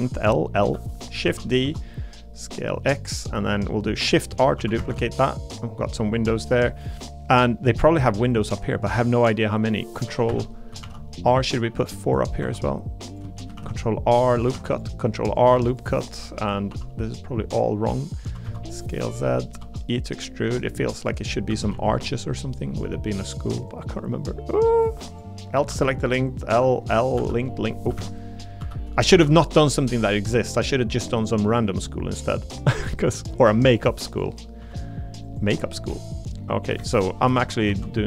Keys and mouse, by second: 1.2 shift+d, 1.6 x, 4.5 shift+r, 4.8 shift+r, 5.5 middle click, 6.0 middle click, 7.0 click, 10.3 Escape, 10.8 ctrl+r, 12.4 3, 13.5 ctrl+r, 14.3 click, 14.5 ctrl+r, 15.3 click, 15.5 3, 15.7 click, 16.7 i, 18.0 click, 18.2 s, 18.4 z, 19.0 click, 19.2 middle click, 19.6 e, 20.9 click, 21.7 a, 21.7 g, 23.7 click, 25.1 click, 26.5 l, 28.0 ctrl+z, 28.6 l, 29.1 shift+d, 29.9 click, 31.2 click, 32.5 click, 34.6 s, 35.2 click, 36.0 click, 36.8 ctrl+z, 37.3 ctrl+z, 37.7 ctrl+z.